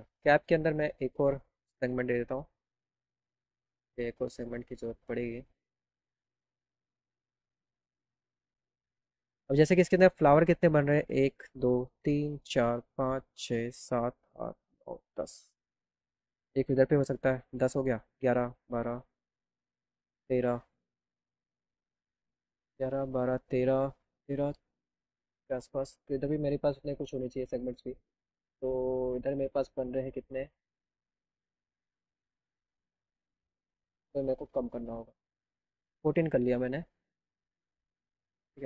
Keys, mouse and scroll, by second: 1.0 click, 3.0 click, 3.9 click, 5.2 click, 5.4 click, 5.6 click, 6.5 click, 7.4 click, 8.4 right click, 29.6-31.6 drag, 33.1 click, 33.6 click, 33.9 click, 34.2 click, 34.6 click.